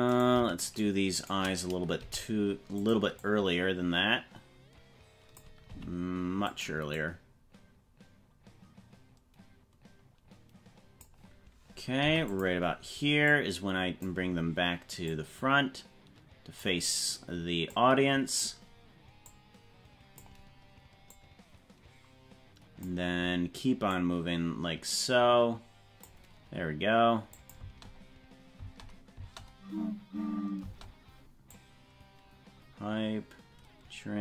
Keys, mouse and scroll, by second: 0.1 right click, 0.7 shift+right click, 2.0 g, 3.2-5.4 drag, 5.7 g, 7.0-11.2 drag, 12.2 i, 13.3 click, 15.2-16.8 drag, 17.8 click, 19.2-20.3 drag, 21.1-22.8 drag, 24.0-26.0 drag, 27.4 click, 27.6 space, 28.6 space, 29.2 space, 30.6 space, 31.5-34.2 drag.